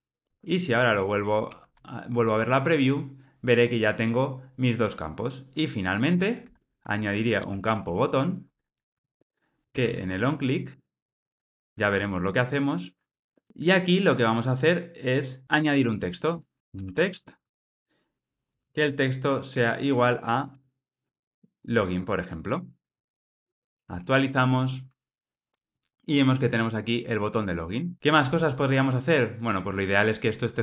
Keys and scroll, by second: 8.9 Return, 11.5 alt+super+l, 12.1 ctrl+alt+o, 13.5 alt+super+l, 17.4 Return, 21.8 Escape.